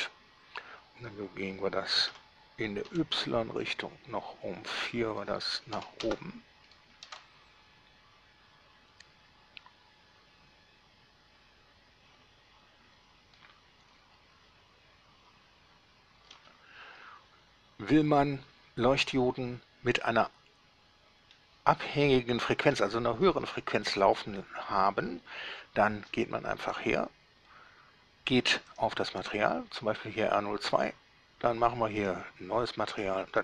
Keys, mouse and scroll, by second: 2.4 g, 3.1 y, 6.1 KP_4, 6.3 Return, 6.9 middle click, 6.9-7.2 scroll down 1, 7.3 alt+a, 16.6 Escape, 19.3 middle click, 20.2-21.7 middle drag, 24.1-24.5 scroll up 1, 28.9 click, 32.3 click, 33.2 click.